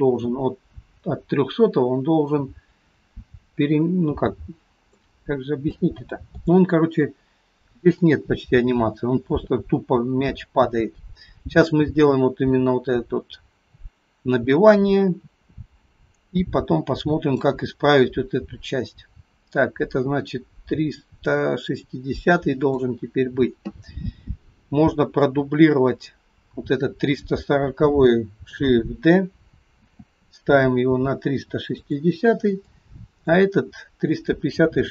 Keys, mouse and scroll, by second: 5.3-5.8 scroll down 3, 5.8 middle click, 7.9 click, 21.4 click, 25.2 click, 29.9 shift+d, 32.8 click.